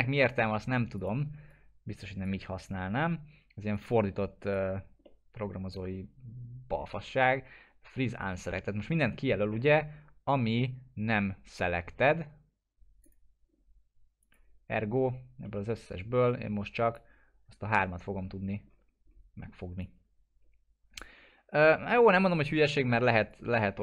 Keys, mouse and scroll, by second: 1.0-2.4 drag, 5.0-5.6 middle drag, 9.0-9.6 scroll up 1, 9.6-11.4 scroll down 1, 13.0 click, 14.9-15.4 scroll down 1, 15.4 middle click, 15.8-16.2 scroll down 1, 16.2-17.2 drag, 18.2-19.8 scroll up 1, 19.8-21.0 drag, 21.5 ctrl+z, 22.3 click, 22.6 middle click, 22.9 scroll down 1, 23.3 click.